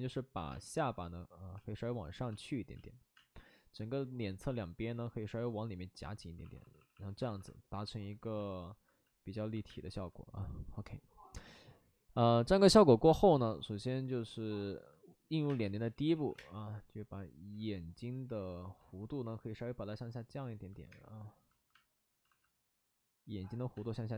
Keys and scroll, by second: 0.4 space, 1.5 space, 2.3 space, 2.7 space, 6.4 d, 6.5 d, 6.7 d, 6.9 d, 7.1 alt+s, 9.6 space, 12.7 space, 15.4-16.3 typing, 17.5 ctrl+z, 19.0 ctrl+z, 21.7 space, 22.2 alt+s, 23.2 alt+s, 23.7 space.